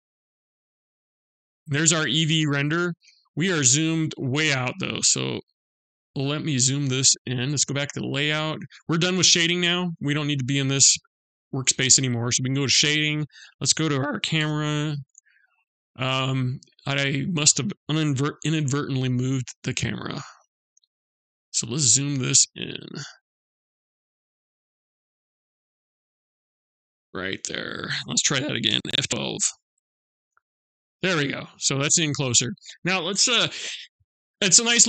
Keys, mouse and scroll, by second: 10.8 click, 14.0 KP_0, 15.3-17.9 scroll down 1, 17.9 n, 19.2 click, 20.2 click, 20.8-21.8 scroll up 7, 22.0 shift+middle click, 23.6 middle click, 25.8-26.1 scroll down 1.